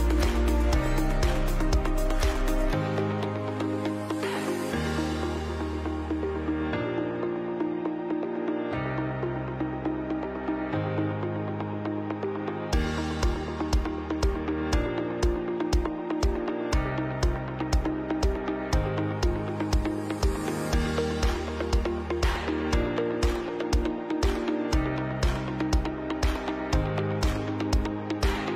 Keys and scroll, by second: 1.7 ctrl+b, 8.1 ctrl+KP_Add, 8.1 ctrl+KP_Add, 8.2 ctrl+KP_Add, 11.2 ctrl+c, 11.4 ctrl+b, 11.8 Down, 11.9 Down, 12.1 Right, 12.6 Left, 13.0 Right, 14.0 ctrl+KP_Subtract, 14.1 ctrl+KP_Subtract, 14.2 ctrl+KP_Subtract, 15.3 ctrl+alt+space, 27.9 Up, 28.0 Right, 28.1 Right.